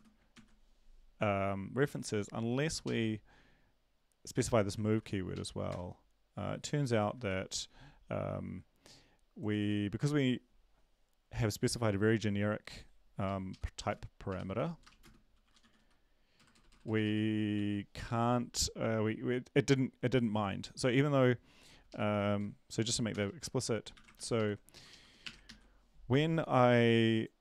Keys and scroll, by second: 0.0-0.3 typing, 0.3 ctrl+s, 2.8 Left, 5.3 ctrl+`, 5.3 Up, 5.7 Return, 7.2 ctrl+`, 13.2 Right, 14.9 Right, 14.9 Left, 14.9-17.0 typing, 17.5 ctrl+s, 23.9 shift+Up, 23.9 Home, 24.1 ctrl+shift+Right, 24.4 ctrl+shift+Right, 24.7 shift+Left, 24.9 shift+Left, 25.4 BackSpace.